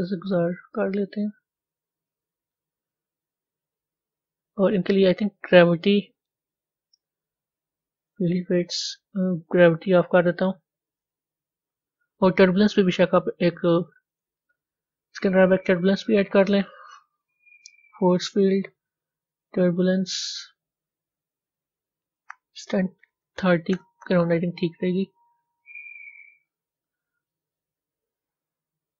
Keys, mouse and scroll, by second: 5.3 scroll down 4, 8.2 click, 9.9-12.9 drag, 14.1 click, 23.8-28.9 drag.